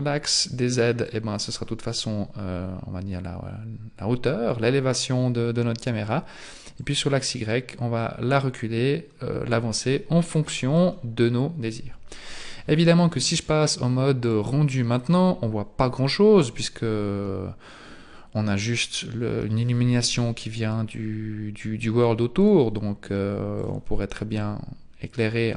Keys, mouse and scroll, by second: 1.1 click, 6.8 click, 13.4 click, 14.3 click, 18.0 click, 22.4 click, 22.9 click.